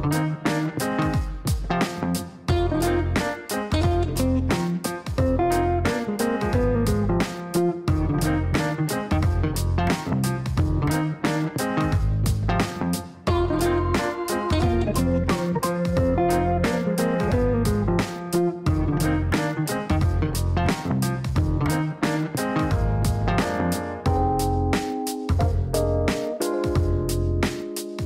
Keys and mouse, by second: 1.3 middle click, 2.3-3.4 middle drag, 4.8 click, 5.8 KP_5, 5.9 KP_0, 6.2 KP_Enter, 8.9 click, 10.5 KP_1, 10.6 KP_5, 10.7 KP_0, 11.0 KP_Enter, 15.3 click, 17.9 KP_1, 18.0 KP_0, 18.1 KP_0, 18.4 KP_Enter, 21.3 middle click, 23.5 click, 24.5 KP_1, 24.6 KP_0, 24.9 KP_Enter.